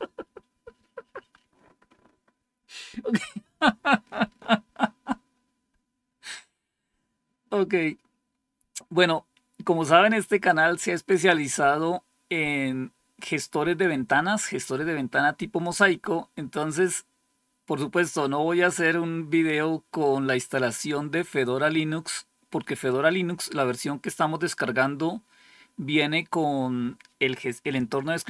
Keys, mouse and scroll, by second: 15.5 click.